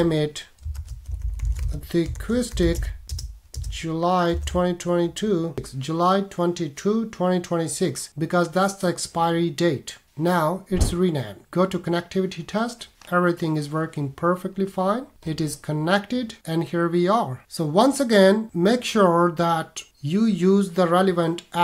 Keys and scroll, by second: 2.7 c, 3.0 space, 3.5 space.